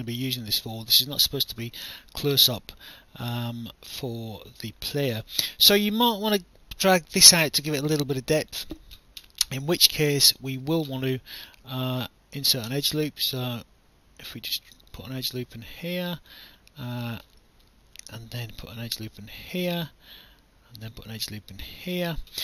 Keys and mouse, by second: 0.0 alt+click, 0.9 alt+click, 1.9 alt+middle click, 2.5 alt+click, 4.7 alt+click, 7.6 alt+click, 10.5 click, 12.4 click, 13.6 click, 18.4 click, 20.8 click.